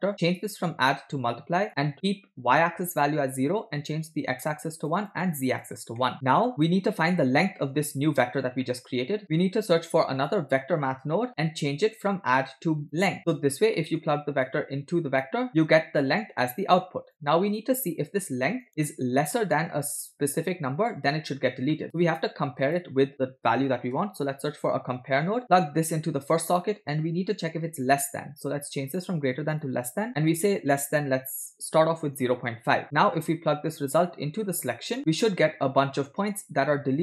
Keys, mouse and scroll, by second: 0.1-1.7 drag, 3.9 click, 5.0 click, 6.0 middle click, 6.5 drag, 6.5 scroll down 2, 7.1-8.3 drag, 8.6 middle click, 9.0 scroll up 1, 9.2 x, 9.3 shift+a, 12.9 click, 13.8 middle click, 14.6 click, 15.5 click, 16.8 click, 17.8-18.6 drag, 18.8-19.4 scroll down 4, 19.4 middle click, 21.7 middle click, 21.8 scroll up 1, 22.2 shift+a, 25.9-26.6 drag, 27.0-27.6 scroll up 4, 27.9-29.6 drag, 30.6 click, 32.8 middle click, 32.8 scroll down 2, 33.9-35.0 drag, 35.0-36.0 middle drag, 36.3-37.0 shift+middle drag.